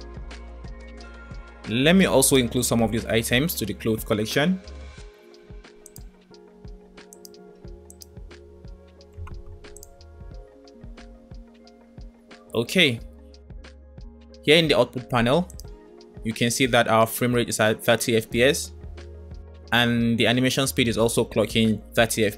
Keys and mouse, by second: 0.7 space, 3.4 m, 7.1 right click, 7.9 click, 8.7 m, 10.4 space, 13.0 space, 13.4 middle click, 14.2-14.5 middle drag, 15.4 click, 19.1 space.